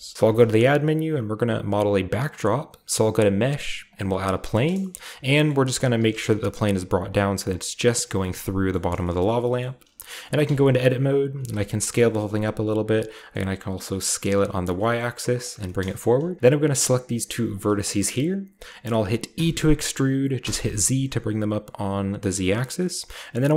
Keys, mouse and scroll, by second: 0.1 shift+middle click, 0.4 a, 3.9 click, 4.5-4.9 scroll down 1, 4.5-7.1 shift+middle drag, 4.9-7.1 scroll up 4, 5.9 g, 6.1 z, 7.4 drag, 8.0-8.4 middle drag, 8.0-8.7 scroll down 1, 8.7 scroll up 1, 8.7 middle drag, 8.8 scroll down 1, 9.0-9.3 scroll up 1, 9.2 middle drag, 9.3 scroll down 1, 9.4 scroll up 1, 9.5-11.1 middle drag, 10.4 Tab, 11.5 s, 12.3 click, 12.9 s, 13.1-14.4 middle drag, 14.6 click, 14.7 g, 15.4 click, 17.5 shift+middle click, 19.3-20.4 typing, 22.3 click, 22.6-23.5 middle drag.